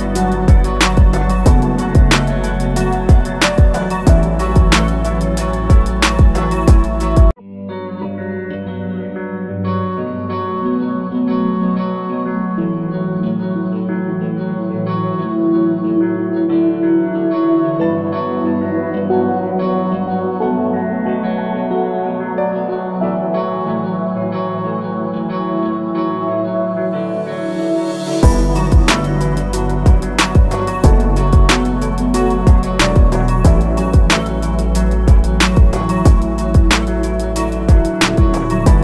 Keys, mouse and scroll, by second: 0.7 click, 8.9 click, 15.9-16.2 alt+scroll down 2, 16.3 alt+scroll up 1, 16.9 scroll down 1, 17.8 click, 23.4 ctrl+g, 24.8 click, 31.0 scroll down 1, 31.6-32.1 scroll up 2, 32.8 click, 34.4 shift+click, 35.2 click.